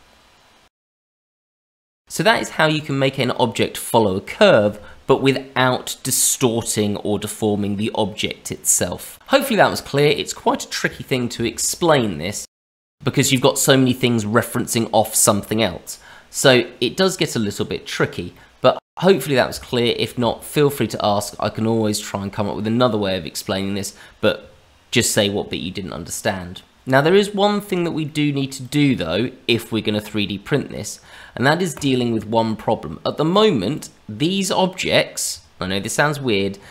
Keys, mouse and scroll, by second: 0.9 middle click, 1.3 shift+middle click, 1.5-2.2 scroll up 1, 2.2 scroll down 1, 2.3-3.6 scroll down 1, 9.2 middle click, 11.4 shift+middle click, 12.1 middle click, 17.6-18.3 scroll up 1, 18.3 middle click, 19.7 shift+middle click, 27.5-28.0 scroll down 2, 28.0 middle click, 28.6 click, 30.5 scroll up 2, 31.8 click, 32.6-33.3 scroll down 2, 33.3 click, 33.7 click.